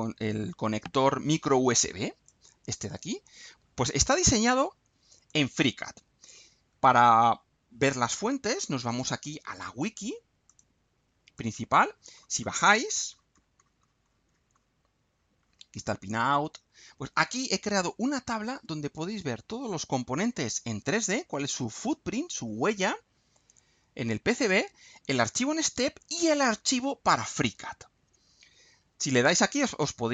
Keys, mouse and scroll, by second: 2.2-3.6 drag, 3.8 scroll down 2, 4.5-5.4 drag, 5.8-6.4 drag, 8.8 click, 10.4 click, 11.4 click, 11.9-12.4 scroll down 1, 15.1 scroll down 1, 16.2-16.8 scroll down 4, 17.5-18.1 scroll down 4.